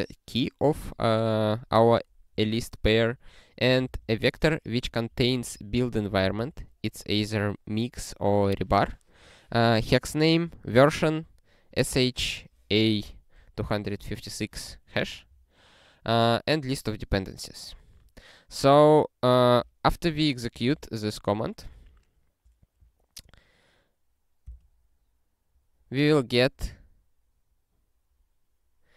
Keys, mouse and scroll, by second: 2.4 click, 3.8 ctrl+b, 5.1 alt+f, 6.1 ctrl+b, 11.7 click, 16.2 click, 20.8 super+t, 21.7 ctrl+p, 24.5 Return, 26.8-27.4 scroll up 42, 27.9-28.3 scroll up 63, 28.4-28.9 scroll up 3.